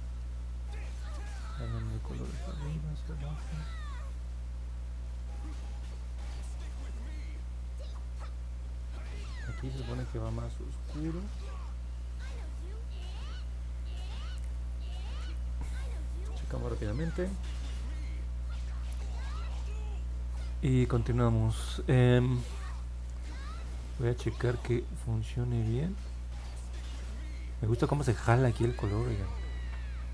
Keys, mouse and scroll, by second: 0.4 click, 1.3 click, 2.0 click, 2.6 click, 3.5 click, 4.0 click, 4.4 click, 5.0 click, 5.5 click, 8.1 click, 8.5 click, 16.2-16.6 scroll down 2, 17.7 middle click, 18.0 middle click, 18.3 middle click, 19.5 alt+middle click, 20.5 scroll up 2, 24.3 click, 25.0 click, 25.4 click, 25.9 click, 26.5 click, 26.9 click, 27.7 click.